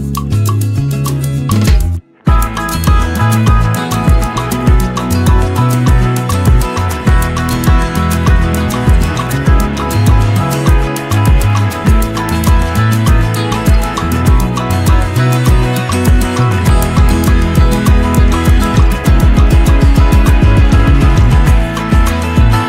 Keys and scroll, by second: 1.7 ctrl+z, 3.1 ctrl+j, 4.0-6.4 shift+Up, 6.5 shift+Up, 6.7 shift+Up, 6.9 shift+Up, 7.0 shift+Up, 7.2 shift+Up, 7.5 shift+Up, 8.1 shift+Down, 8.2 shift+Down, 14.4 ctrl+shift+g.